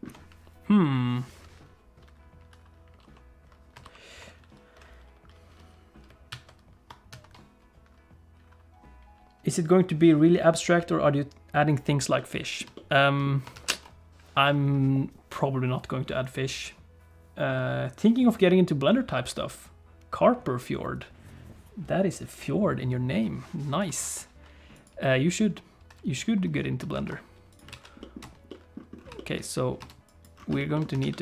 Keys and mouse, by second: 3.0 alt+h, 3.8 shift+h, 6.3 alt+a, 7.1 ctrl+s, 12.2 middle click, 12.7 shift+middle click, 13.6 ctrl+s, 24.0 click, 27.0 ctrl+s, 27.5 click, 27.7 alt+a, 28.0 middle click, 28.2 space, 28.5 middle click, 29.2 shift+middle click, 29.8 space, 30.1 click, 30.6 shift+middle click, 30.7 shift+middle click, 31.0 shift+a.